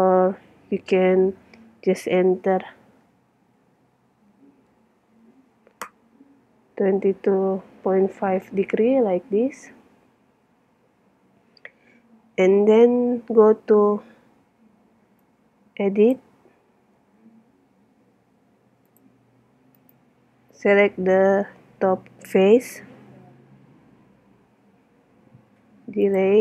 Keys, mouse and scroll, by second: 12.2 middle click, 13.3 middle click, 13.7 Tab, 13.9-15.2 middle drag, 15.2-17.1 drag, 19.8 click, 20.9 right click, 21.4-23.3 middle drag, 23.7 x.